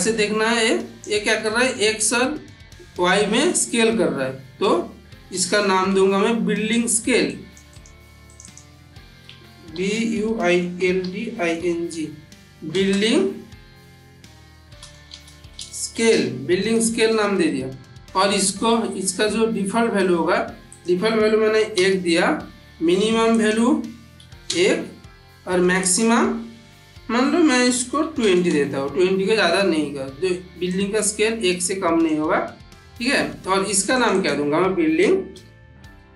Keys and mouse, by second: 1.3-1.9 middle click, 5.2 n, 6.6 click, 9.0 click, 9.6-12.6 typing, 15.0-16.3 typing, 20.6 click, 23.2 click, 30.5-32.1 drag, 33.8 click, 34.9 click, 35.2-36.1 typing.